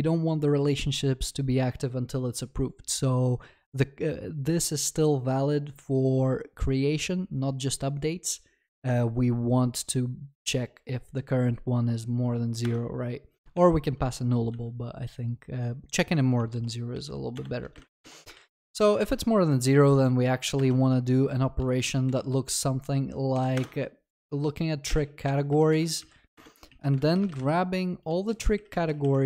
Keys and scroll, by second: 12.8 Return, 13.6 ctrl+z, 16.9 ctrl+z, 18.3 Return, 20.5 Return.